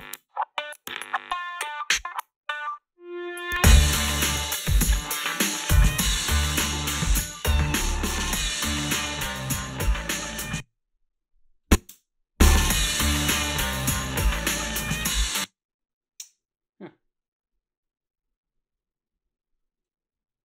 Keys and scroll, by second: 10.3 space, 11.9 space, 15.2 space.